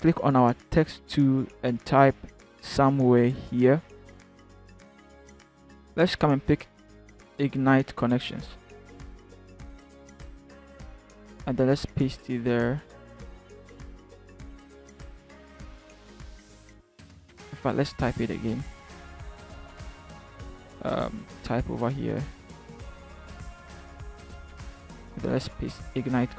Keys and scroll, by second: 9.3 ctrl+c, 11.6 ctrl+v, 17.1 Delete, 25.1 ctrl+v.